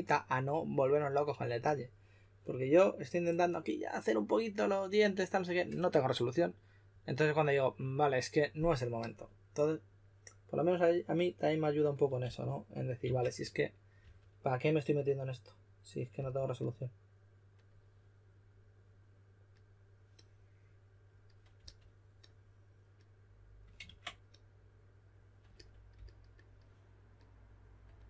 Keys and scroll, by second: 12.2-14.0 typing, 15.9-16.6 typing, 21.5 typing, 23.8 super+z.